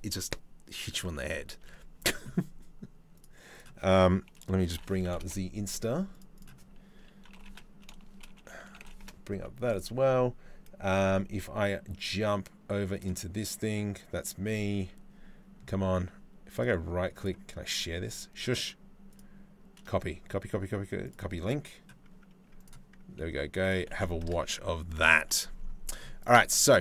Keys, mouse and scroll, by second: 0.6 Tab, 1.2 Tab, 26.2 Tab, 26.6 Tab.